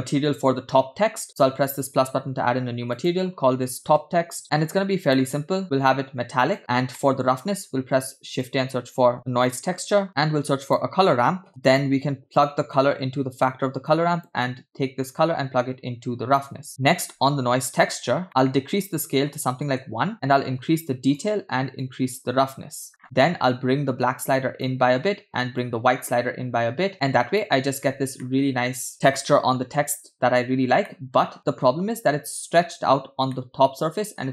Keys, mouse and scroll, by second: 1.7-2.1 drag, 2.9-4.4 drag, 5.4 middle click, 5.7 click, 7.0 middle click, 7.8 shift+a, 10.2 scroll down 1, 10.5 shift+a, 11.5 click, 12.4 click, 12.8-13.6 drag, 14.0-14.4 drag, 15.1-16.7 drag, 16.7 middle click, 16.7-17.6 scroll up 2, 18.2-19.7 drag, 20.3 click, 21.9-22.9 drag, 23.6-24.8 drag, 25.6-27.4 drag, 28.3-28.9 shift+middle drag, 28.9-30.6 scroll up 3, 31.1-32.3 middle drag, 33.5-34.3 middle drag.